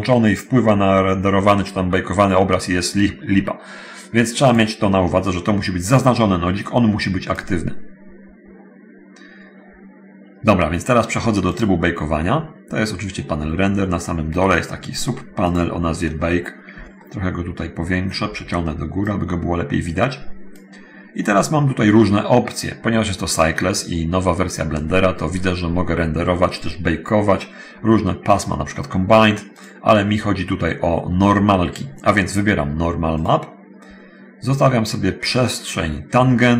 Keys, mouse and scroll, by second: 4.6 click, 6.1-7.7 drag, 12.4-12.8 scroll down 1, 13.0-14.1 scroll down 1, 15.6 click, 16.0 scroll down 1, 16.6 scroll down 1, 19.0-20.6 drag, 33.4 click.